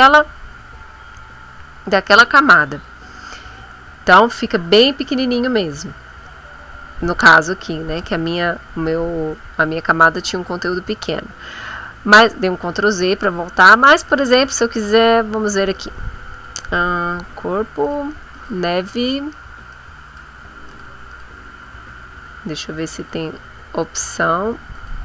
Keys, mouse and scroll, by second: 10.8 ctrl+z, 14.0 click, 14.9 click, 15.7 click, 16.3 click, 17.8 click, 18.3 click, 19.7 click, 20.6 click, 21.1 click, 23.0 click, 24.8 click.